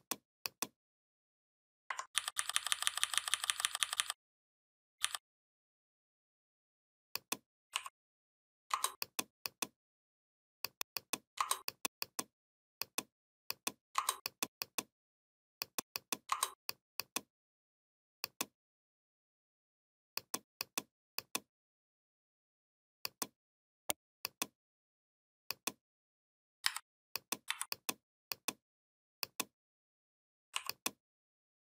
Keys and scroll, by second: 2.0 ctrl+[, 4.8 ctrl+[, 26.5 a, 27.3 v.